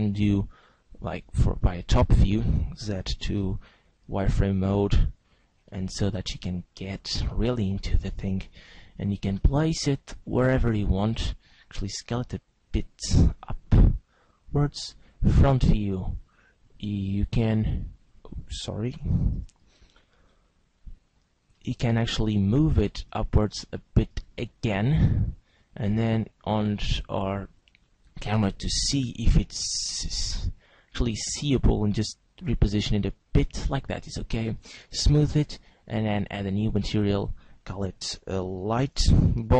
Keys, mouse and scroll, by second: 1.3 click, 1.9 scroll down 1, 2.8-4.2 scroll down 8, 2.8 z, 4.2 shift+middle click, 4.9-5.7 scroll up 3, 5.7 shift+middle click, 6.7-7.2 scroll up 2, 7.2 shift+scroll down 1, 7.5 shift+middle click, 8.5 g, 10.3 click, 11.8 s, 13.1 click, 14.1 click, 15.5-16.1 scroll down 1, 16.1 scroll down 3, 17.2 click, 17.9 click, 18.1 click, 19.1 shift+c, 20.4-21.2 scroll up 6, 21.6 shift+middle click, 22.9 click, 26.0 click, 27.0 click, 28.9 z, 32.1 g, 33.6 click, 34.5 click, 35.7 click, 36.9 click.